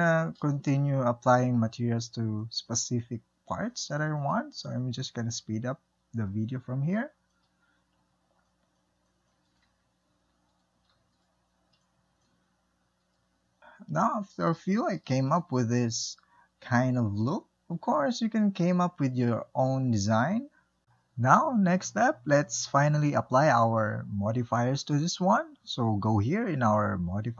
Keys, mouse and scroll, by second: 7.1 Tab, 7.3 middle click, 7.5 ctrl+z, 7.6 shift+click, 7.6 middle click, 7.8 click, 7.9 scroll down 2, 7.9 middle click, 8.1 alt+click, 8.4 middle click, 8.5 shift+click, 8.6 scroll up 1, 8.8 middle click, 8.8 shift+click, 8.9 middle click, 9.0 shift+click, 9.1 middle click, 9.3 middle click, 9.7 scroll down 3, 9.8 middle click, 9.8 click, 10.1 shift+middle click, 10.6 shift+middle click, 10.8 click, 10.9 shift+middle click, 10.9-11.4 scroll up 3, 11.0 alt+click, 11.2 shift+middle click, 11.5 scroll down 3, 11.5 shift+click, 12.3-20.8 shift+middle drag, 24.7-27.3 middle drag.